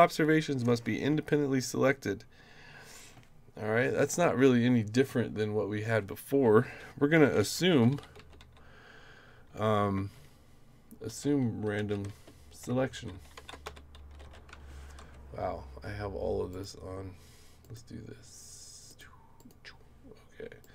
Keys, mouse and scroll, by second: 7.0-8.9 typing, 9.9-14.7 typing, 15.0 Up, 16.5 click, 17.6 click, 18.9 click, 19.4 click, 20.6 click.